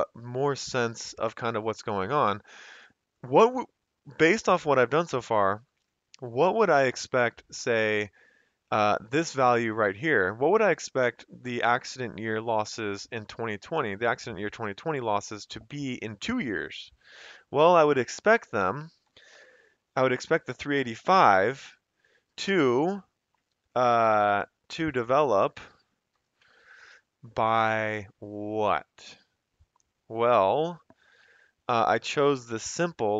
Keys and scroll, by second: 19.0 =, 26.2 *.